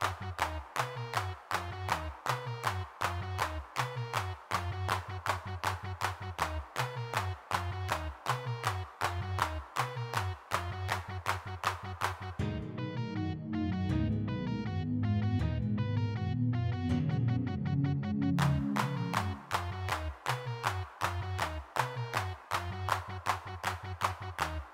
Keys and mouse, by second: 0.4 x, 2.5 middle click, 3.0 3, 3.1 middle click, 3.7 middle click, 4.2-5.7 drag, 6.9-8.2 middle drag, 10.2 middle click, 10.5 f, 12.3 middle click, 13.1 x, 13.6 3, 14.7-17.1 middle drag, 19.4 g, 19.6 f, 20.0 middle click.